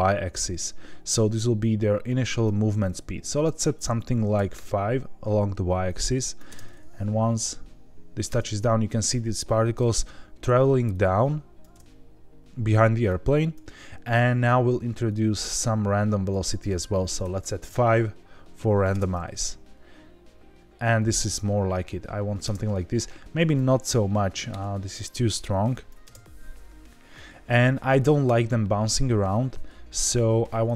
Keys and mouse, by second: 0.5-2.4 drag, 3.4-5.0 drag, 5.8 click, 6.4 space, 8.3 space, 10.9-11.6 drag, 11.7 space, 12.4 space, 13.0 click, 15.0-16.3 drag, 16.6-17.8 drag, 18.5 drag, 18.9 space, 22.5 space, 23.4-24.8 drag, 25.6 click, 26.0 space, 28.1 space, 29.3-30.6 drag.